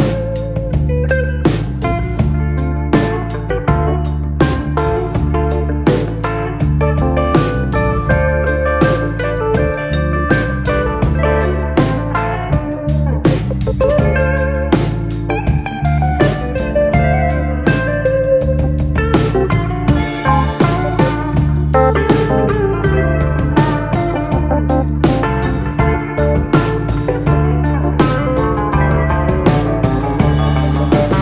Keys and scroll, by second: 0.2 a.